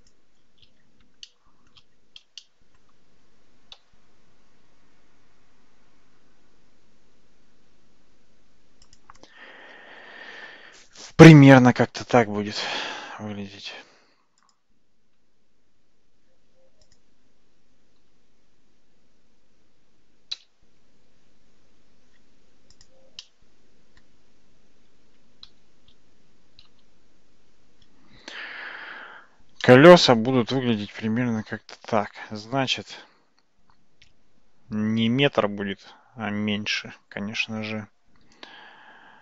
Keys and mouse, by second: 1.3-1.8 shift+middle drag, 2.4-2.8 shift+middle drag, 3.8 g, 14.4 click, 15.2 Tab, 20.4 f, 21.2 Tab, 22.8 click, 23.2-24.0 middle drag, 25.5 shift+z, 27.5 alt+z, 29.6-39.2 middle drag.